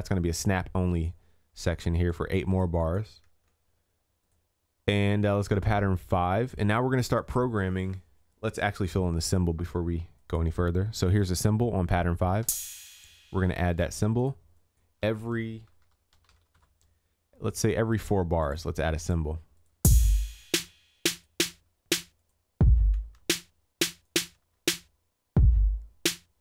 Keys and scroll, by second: 3.5 ctrl+s, 20.6 ctrl+s.